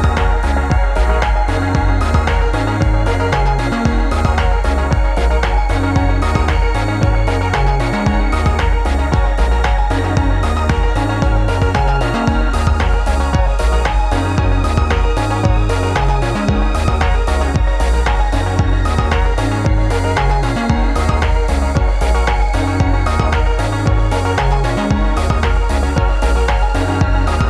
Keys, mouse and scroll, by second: 0.8-1.8 drag, 9.2 shift+Home, 10.3 click, 13.5 Return, 14.6 click, 18.0 click, 18.6 alt+scroll up 1, 18.8 space, 18.9-19.3 click, 19.2 space, 19.8 click, 22.8-27.4 drag.